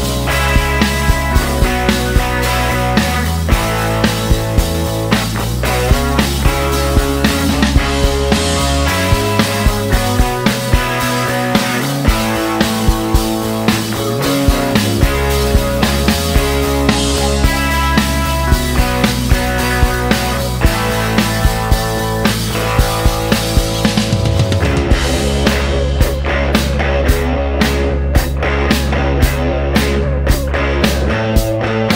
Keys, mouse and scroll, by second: 1.9 click, 3.3 click, 4.7 a, 6.2 2, 6.4 Return, 8.5-14.7 drag, 14.8-15.9 middle drag, 17.7 click, 19.7 click, 20.9 a, 23.0 2, 23.3 0, 24.0 Escape, 25.6-26.8 drag, 27.7 click, 28.9 middle click, 30.5 click.